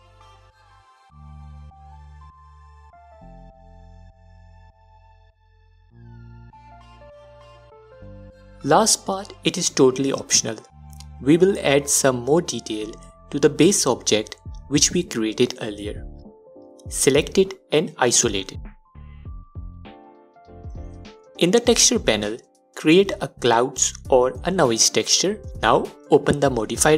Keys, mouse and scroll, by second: 0.8-9.8 drag, 8.4-9.4 scroll down 1, 10.5-16.3 alt+drag, 17.0 click, 19.1 KP_Divide, 21.0 click, 22.2 click, 23.4-26.7 drag.